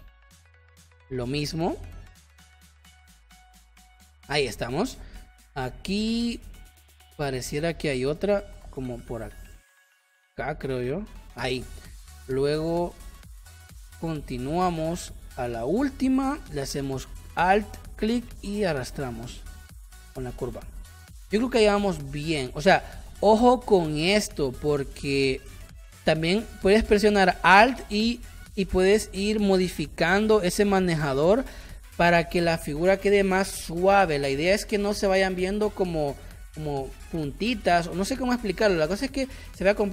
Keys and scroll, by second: 4.3 space, 11.5 space, 20.2 space, 21.5 space, 22.9 space.